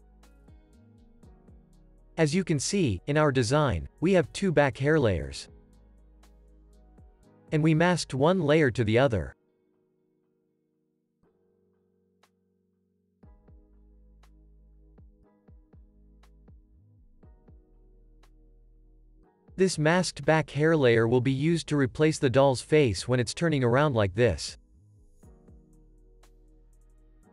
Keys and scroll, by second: 12.2 Escape, 26.5 super+z.